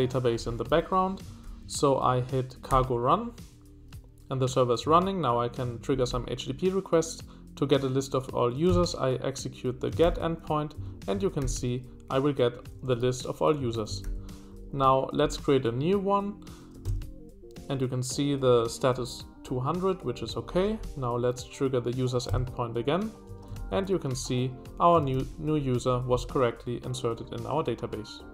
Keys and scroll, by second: 1.4 ctrl+p, 5.6 Escape, 5.9 k, 6.1 k, 8.5 space, 8.7 x, 10.0 ctrl+y, 10.7 Escape, 11.4 ctrl+u, 13.0 shift+g, 13.6 Escape, 14.0 ctrl+h, 14.7 j, 16.7 space, 16.8 x, 20.2 Escape, 20.4 k, 20.6 k, 20.8 k, 22.1-25.7 typing, 23.2 Escape, 23.5 ctrl+l.